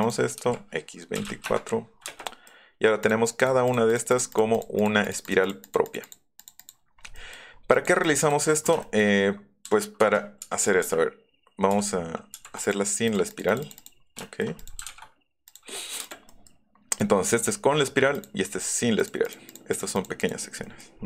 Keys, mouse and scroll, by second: 0.0 click, 0.4 x, 1.3 KP_4, 1.8 middle click, 2.1 middle click, 2.1 space, 2.5 middle click, 3.0 click, 3.3 click, 3.5 middle click, 3.6 click, 3.9 click, 4.3 click, 4.5 click, 4.8 click, 5.0 click, 5.2 click, 5.4 click, 5.6 click, 5.8 click, 6.0 click, 6.3 click, 6.6 click, 7.0 middle click, 7.5 middle click, 7.7 click, 8.1 click, 9.2 Up, 10.4 z, 11.7 z, 12.3 z, 12.6 click, 13.1 click, 13.5 click, 13.8 click, 14.6 click, 15.4 click, 16.0 space, 16.2 click, 16.9 click, 18.1 click, 19.0 click, 19.2 click, 19.5 click, 19.7 click, 19.9 click, 20.2 click, 20.9 middle click, 20.9 scroll up 2.